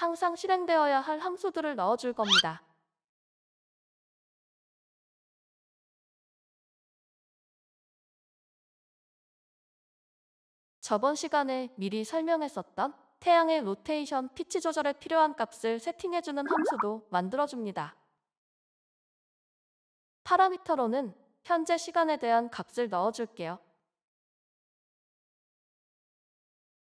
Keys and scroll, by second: 1.1 ctrl+s, 1.6 ctrl+s, 13.9 Return, 13.9-19.9 typing, 20.0 ctrl+s, 22.1 alt+Return, 25.2 Return, 26.0-26.8 typing.